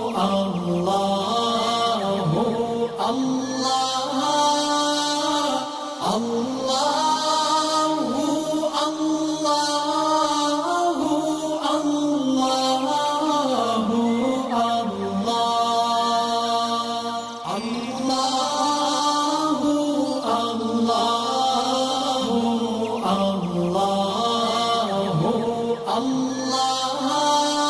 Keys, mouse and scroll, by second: 1.4 space, 1.5-2.8 drag, 3.0-4.0 alt+click, 3.6-4.8 alt+right drag, 4.8-6.5 drag, 9.7-18.5 drag, 19.4-20.5 shift+drag, 21.7 alt+scroll up 1, 22.6-23.2 click, 23.8 alt+scroll down 1, 24.5-25.1 click, 25.8 alt+scroll up 1, 26.7 click.